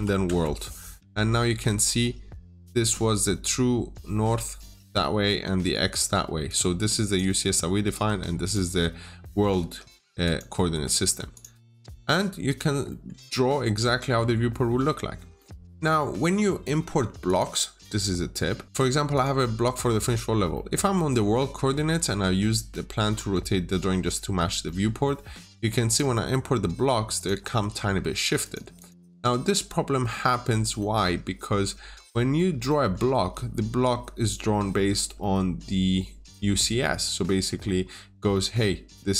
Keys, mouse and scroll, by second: 0.1 Return, 6.3 click, 7.9 Escape, 8.3 click, 10.9 Escape, 11.2 click, 11.5 double click, 11.8 Delete, 12.3-12.7 scroll up 1, 12.7 middle click, 14.2-14.5 scroll up 1, 15.0 scroll down 1, 15.2 middle click, 17.1 click, 19.8-20.2 scroll up 1, 20.2 scroll down 1, 20.4 middle click, 20.8 scroll down 1, 22.1 scroll up 1, 23.0 scroll down 1, 24.5 middle click, 24.9-25.3 scroll up 1, 25.7 click, 27.5 Escape, 28.3 click, 28.6 double click, 30.4 scroll down 1, 30.7 middle click, 31.4 scroll up 1, 32.0 Escape, 32.3 scroll down 1, 32.5 middle click, 32.8-34.8 scroll down 1, 35.1 middle click, 36.8-37.7 scroll up 1, 38.2 middle click.